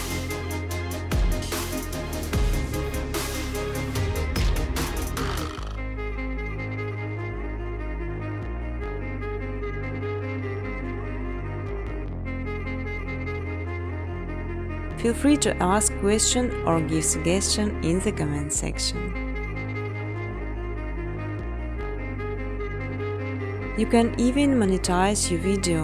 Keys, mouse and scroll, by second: 0.4-1.7 typing, 3.1 click, 3.3 click, 6.8 click, 7.2-7.7 typing, 7.9 Tab, 11.2 Return, 12.6 scroll, 15.1 click, 16.4 click, 16.4-17.8 typing, 18.1 click, 18.3 click, 21.0 click, 21.4-22.2 typing, 22.1 click, 23.4 click, 24.4 click, 24.8-25.8 typing.